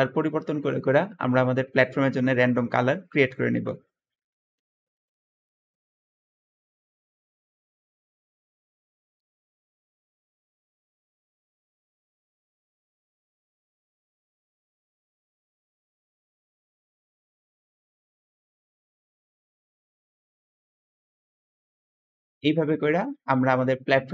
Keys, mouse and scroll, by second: 14.3 click, 22.3-23.4 scroll down 3.